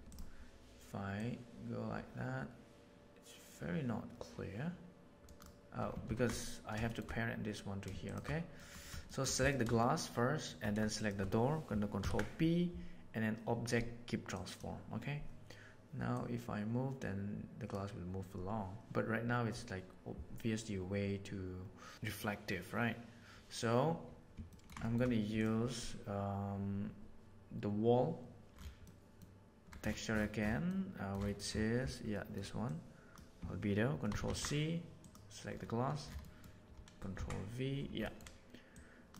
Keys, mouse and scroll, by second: 0.0 click, 1.1 click, 4.5 click, 6.0 ctrl+z, 6.8 middle drag, 8.5 middle drag, 9.0 shift+middle click, 9.4 click, 9.8 shift+middle click, 12.0 ctrl+p, 16.1-17.8 drag, 24.5 ctrl+middle click, 24.8 shift+middle click, 25.3 click, 28.9 middle click, 30.6 middle click, 32.2 middle click, 32.6-33.1 drag, 34.0 ctrl+c, 34.2 ctrl+c, 35.0 click, 36.2 middle click, 37.0 ctrl+c, 37.1 ctrl+v, 38.1 middle click, 38.7 click.